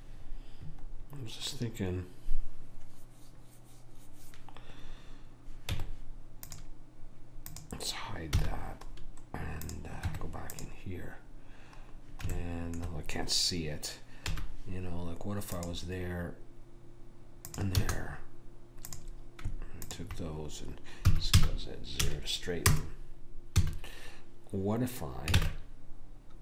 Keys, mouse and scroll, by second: 5.8 Tab, 7.6 click, 8.4 h, 10.1 Tab, 14.4 k, 18.9 click, 21.1 s, 23.6 a, 25.4 ctrl+Tab.